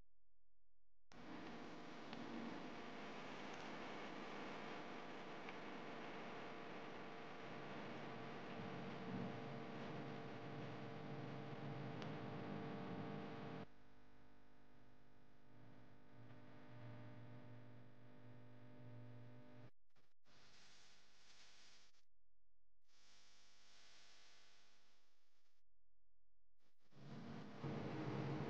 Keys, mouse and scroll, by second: 1.2 click, 2.3 click, 2.7 click, 3.1-4.1 middle drag, 4.1 Tab, 5.1 alt+click, 6.3 e, 9.0 Tab, 9.5 alt+z, 10.1 scroll up 1, 10.2-11.7 middle drag, 11.9 Tab, 12.1-12.8 scroll up 1, 12.8 alt+click, 13.5 alt+click, 14.1-15.1 middle drag, 15.1 e, 17.4-18.8 middle drag, 18.8 Tab, 19.2-19.6 scroll down 5, 19.8-20.8 middle drag, 20.8 click, 21.2-22.3 middle drag, 22.3-22.9 scroll up 4, 22.9 click, 24.1 s, 25.6-26.9 middle drag, 26.9 click.